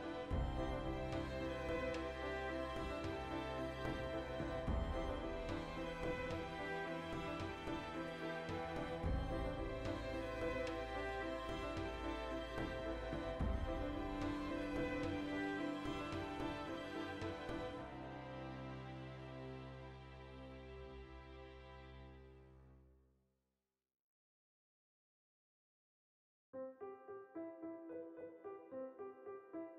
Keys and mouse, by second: 0.4 alt+q, 1.7 right click, 1.9 Tab, 2.3 a, 2.4 z, 2.6-4.0 ctrl+middle drag, 4.0 alt+right click, 5.0 1, 6.1 \, 6.7 ctrl+i, 7.0 g, 8.4 click, 8.6 ctrl+r, 9.7 right click, 10.2 ctrl+r, 10.5 right click, 11.1 Tab, 11.4 z, 12.4-13.5 ctrl+shift+middle drag, 13.3 z, 13.5-14.3 right drag, 14.3 Tab, 14.9 z, 15.5 alt+q, 16.2-17.8 shift+middle drag, 17.8-18.8 drag, 18.9 click, 19.4 g, 19.9 right click, 20.7 right click, 21.1 g, 25.3 click, 25.9 alt+q, 26.2 ctrl+shift+middle click, 26.7 right click, 27.1 g, 27.9 click, 28.3 right click, 28.4 g, 28.9 click, 29.2 right click, 29.3 g.